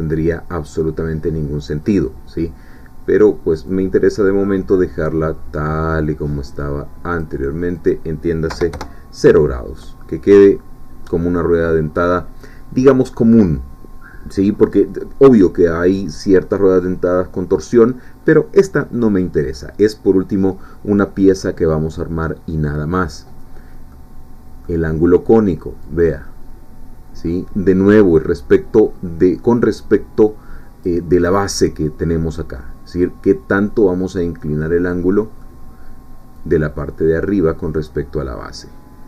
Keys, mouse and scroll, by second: 3.7-7.6 drag, 7.7 click, 8.5 0, 8.7 Return, 9.8-11.2 middle drag, 23.9-24.9 middle drag, 25.9-31.0 drag, 34.2-35.6 middle drag, 36.3-39.0 drag.